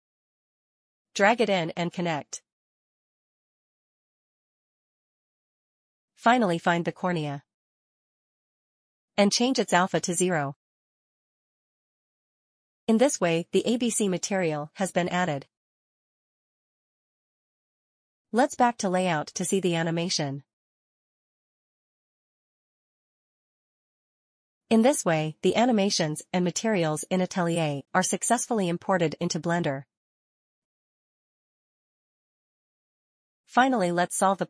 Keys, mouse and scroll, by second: 0.8 click, 2.7 click, 3.6 click, 4.8 click, 7.1 click, 8.7 middle click, 9.0 middle click, 10.0 click, 10.9 click, 11.2 scroll down 1, 11.7 click, 12.2 middle click, 12.9 middle click, 14.1 scroll down 1, 16.3 click, 18.7 click, 21.6 middle click, 21.8 middle click, 22.3 scroll down 1, 22.6 click, 22.7 click, 23.2 click, 23.4 scroll down 1, 23.6 scroll up 1, 23.7 shift+middle click, 23.7 shift+middle click, 23.9 click, 26.1-26.6 scroll up 2, 29.5 scroll down 1, 30.9 scroll down 1, 32.5 click, 33.4 click, 34.3 click.